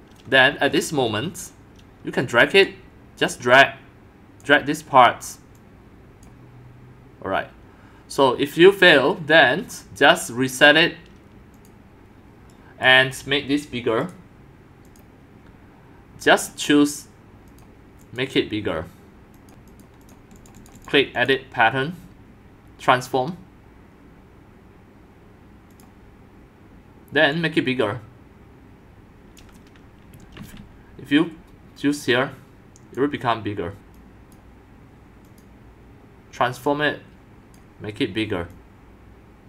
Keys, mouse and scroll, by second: 0.3-2.2 scroll, 2.7 Escape, 2.7 right click, 3.3 right click, 3.3-4.4 drag, 5.6 click, 7.4 middle click, 8.1 right click, 8.9 middle click, 9.2-11.3 drag, 11.5 click, 11.7-12.8 drag, 14.9 click, 16.3 click, 17.5 click, 18.0 click, 19.4 click, 19.5 ctrl+c, 19.7 click, 20.0 click, 20.4 click, 20.6 click, 20.8 click, 21.2 click, 25.7 click, 27.0 click, 27.3-29.4 drag, 30.4 ctrl+z, 32.0 click, 34.0 click, 35.3 click, 36.7 click, 38.5-39.4 drag.